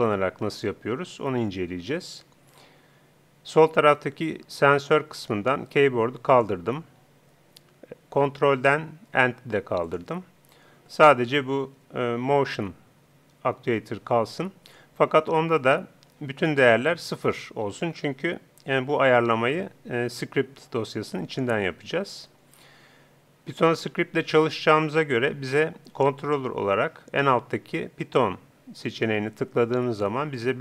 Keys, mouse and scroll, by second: 6.3-7.9 drag, 9.9-11.7 drag, 16.6-18.2 drag, 26.2-27.8 drag, 28.0 click.